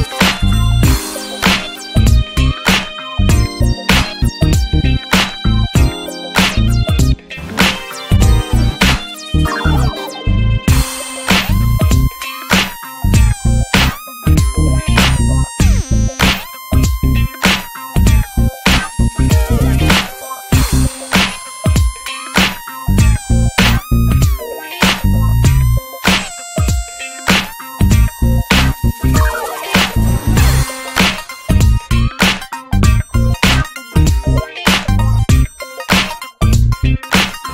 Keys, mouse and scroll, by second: 0.9 middle click, 1.2 scroll down 1, 1.4 middle click, 1.5 scroll up 2, 2.9 shift+a, 3.1 scroll down 2, 3.2 alt+middle click, 3.4 scroll up 1, 3.8 shift+middle click, 3.9-4.3 shift+scroll up 1, 4.3 click, 4.6 scroll up 1, 4.8-5.3 shift+middle drag, 5.3 r, 7.6 alt+middle click, 7.6-8.2 alt+scroll up 2, 8.3 s, 10.6 alt+middle click, 10.7-11.1 scroll up 3, 11.5 click, 12.0 s, 13.0 click, 13.4 alt+middle click, 13.7-14.4 alt+scroll up 1, 14.5 alt+middle click, 14.7 alt+middle click, 15.3 click, 16.8 click, 19.1-19.9 drag, 19.9-33.1 middle drag, 33.1-37.5 drag.